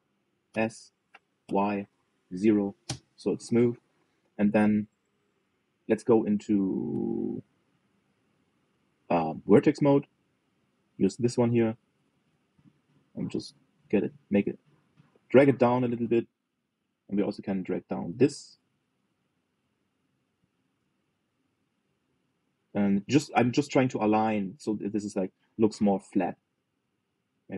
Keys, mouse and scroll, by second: 1.2 s, 9.8 click, 10.4-11.3 scroll up 2, 11.3 scroll up 1, 11.3 click, 12.7 g, 18.0 click, 18.8 g, 23.2 click, 24.1 g.